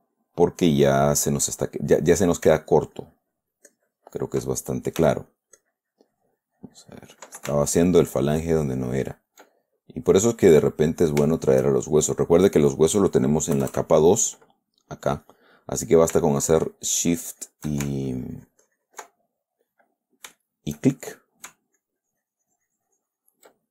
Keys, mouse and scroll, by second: 3.1-4.8 ctrl+drag, 5.4 f, 5.7-7.6 drag, 7.9-9.9 ctrl+drag, 9.9-11.4 ctrl+middle drag, 11.7 shift+click, 13.9 KP_Add, 16.7 shift+click, 17.4 shift+click, 18.2-19.5 ctrl+shift+drag, 19.5 ctrl+middle click, 20.2-21.9 middle drag, 22.2-23.7 ctrl+drag.